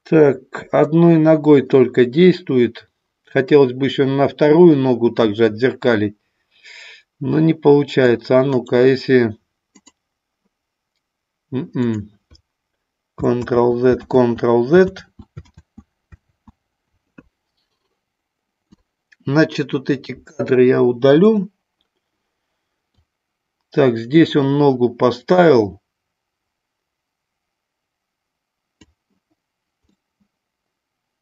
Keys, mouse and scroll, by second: 8.4-9.9 right drag, 11.7 click, 13.4 ctrl+z, 14.1 ctrl+z, 14.9 ctrl+z, 15.4 ctrl+z, 16.2 ctrl+z, 18.7 click, 21.2 Delete, 22.9-28.8 drag, 29.8-31.2 middle drag.